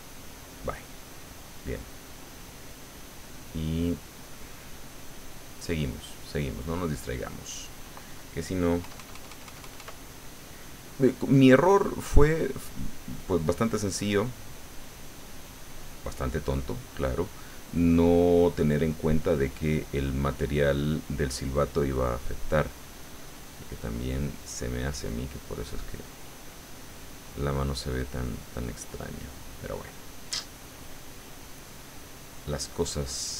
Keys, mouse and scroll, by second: 1.3 middle click, 2.2-5.5 drag, 5.5 middle click, 6.3 middle click, 7.1-8.2 middle drag, 8.8 KP_Add, 10.0 middle click, 11.6-15.1 drag, 14.1 middle click, 15.4 click, 16.2-18.6 drag, 18.6 middle click, 19.4-21.0 drag, 21.0 middle click, 22.5-25.8 drag, 25.1 middle click, 26.0-30.2 drag, 29.1-30.2 middle drag, 30.6-33.3 drag.